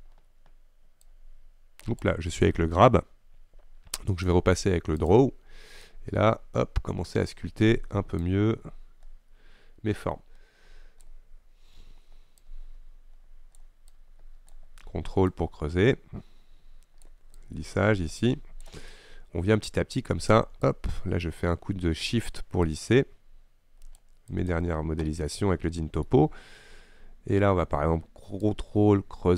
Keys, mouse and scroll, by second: 1.1-2.6 drag, 2.6 ctrl+z, 5.2 click, 5.9-24.9 drag, 24.9-25.2 scroll down 2, 25.2-28.5 middle drag, 28.5-29.3 ctrl+drag.